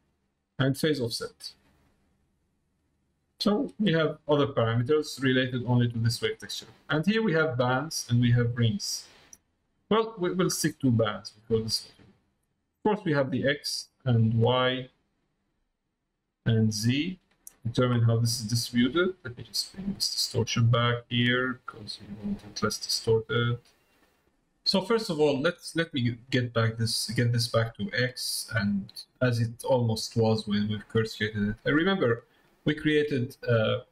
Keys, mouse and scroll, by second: 0.6-4.4 drag, 5.2 click, 7.6-8.7 drag, 10.7 click, 13.4-14.4 drag, 15.6-16.7 drag, 18.4 middle click, 19.9-22.4 drag, 23.0-24.0 drag, 25.9-27.2 drag, 28.0 middle click, 29.5 click, 30.6 middle click, 32.9 Tab.